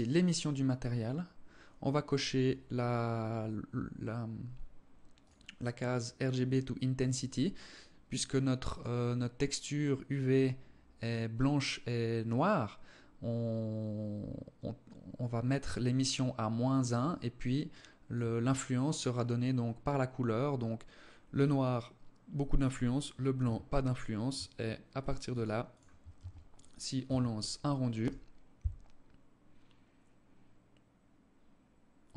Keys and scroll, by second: 25.3 ctrl+s, 26.3 Tab.